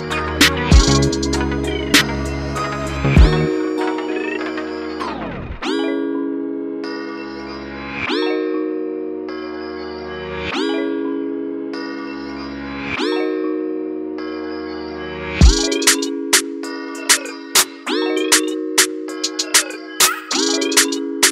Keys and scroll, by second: 0.3 ctrl+z, 0.8 m, 2.3 m, 2.7 f, 2.8 ctrl+v, 3.6 v, 4.1 ctrl+t, 6.0 Return, 11.5 ctrl+t, 17.4 Return, 18.0 ctrl+=, 20.0-21.3 typing.